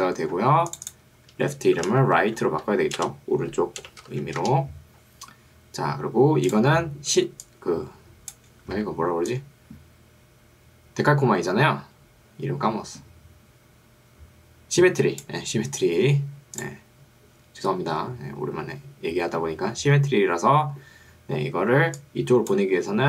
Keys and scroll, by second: 1.9-4.3 typing, 4.5 Return, 7.3 ctrl+2, 8.9 Escape, 21.9 ctrl+2, 22.9 Escape.